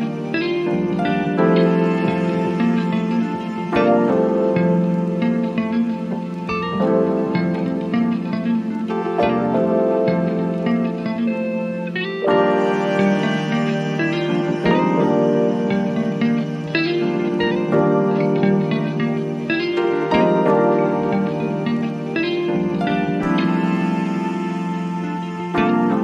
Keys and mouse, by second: 2.1-17.7 drag, 17.7-26.0 drag.